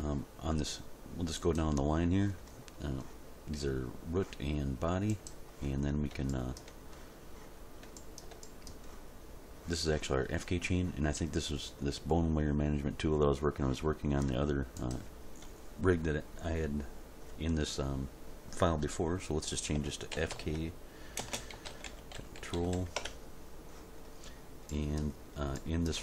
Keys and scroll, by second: 20.1-22.7 typing, 23.0 Return.